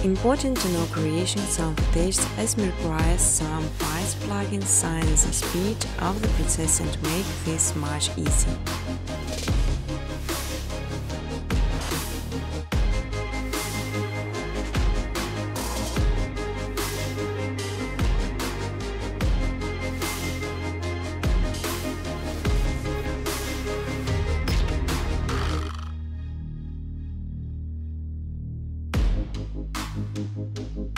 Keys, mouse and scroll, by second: 0.5 click, 0.8 click, 1.2 typing, 4.4 click, 4.9 middle click, 4.9 middle click, 5.5 ctrl+c, 5.7 ctrl+d, 6.0 click, 6.5-19.1 typing, 7.5 ctrl+c, 7.8 ctrl+d, 8.3 click, 10.2 click, 12.5 click, 13.9 click, 17.9 Tab, 21.0-24.2 typing, 22.5 Tab, 24.7 Tab, 26.0-26.8 typing, 28.0 click, 29.2 click, 29.4-30.9 typing, 29.6 click.